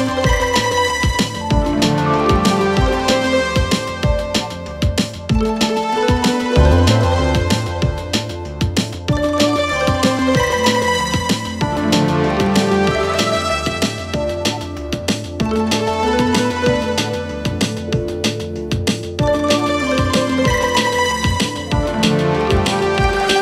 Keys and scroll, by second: 10.9 Escape, 18.5 Escape.